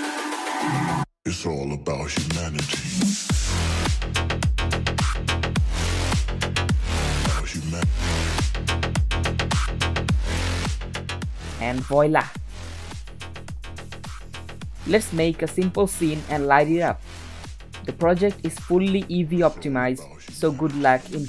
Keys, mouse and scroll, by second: 0.0 scroll down 2, 0.1-3.5 typing, 4.7 r, 5.5 g, 7.1 scroll up 1, 7.3 click, 8.2 click, 10.1 click, 11.9 click, 12.2 shift+a, 12.4 s, 12.7 scroll up 3, 12.8 g, 13.4-13.8 scroll down 4, 13.5 middle drag, 13.8-14.1 scroll up 2, 14.1 shift+a, 14.3 g, 14.6 middle click, 14.7 s, 15.1 shift+middle click, 15.4 g, 15.7 click, 16.1 middle click, 16.3 click, 17.1 scroll down 2, 17.3 g, 18.4 click, 18.7-19.0 middle drag, 19.0 scroll down 4, 19.2 KP_7, 19.5 shift+middle click, 19.7 r, 20.0-20.8 middle drag, 21.0 g.